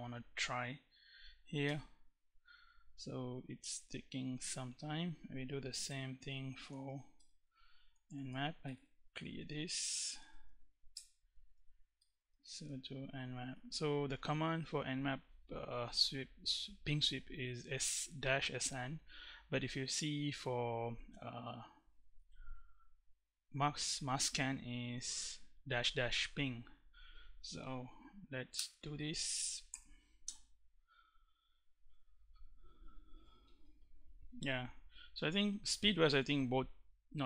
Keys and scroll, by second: 1.2 Return, 5.3 Return, 6.0-12.6 typing, 13.0 Right, 28.1 Return, 29.3 1, 29.8 Return.